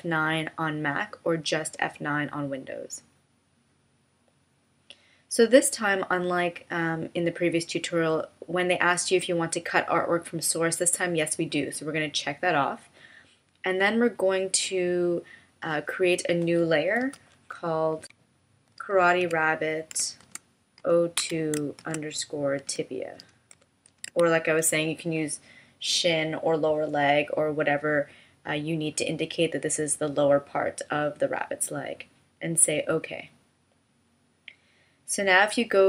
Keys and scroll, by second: 17.0 BackSpace.